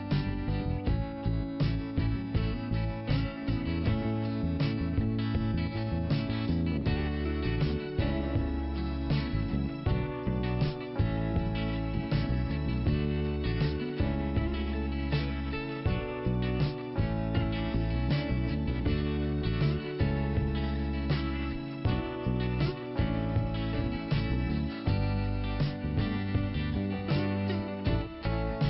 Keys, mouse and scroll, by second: 2.9 scroll up 2, 3.3-4.0 scroll down 1, 4.4 click, 5.7 click, 5.8 click, 6.4 click, 8.0 click, 8.5 click, 9.5 click, 9.6 click, 11.3 middle click, 12.4 click, 13.2 click, 14.1 click, 16.3 click, 18.2 click, 20.3 click, 21.5 click, 21.7 click, 22.1-22.6 scroll down 1, 22.6 click, 23.3 click, 24.2 scroll up 2, 25.1 click, 28.3 click.